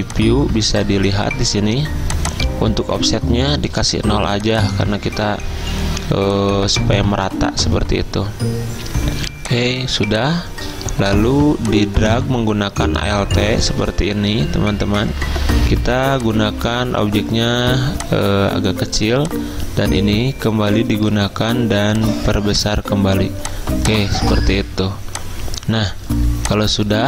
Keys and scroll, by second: 3.2 0, 5.2 0.